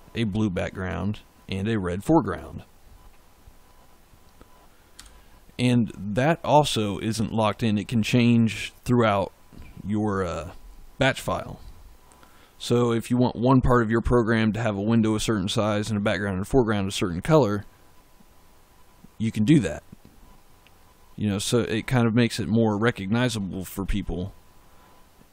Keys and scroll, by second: 4.8 f.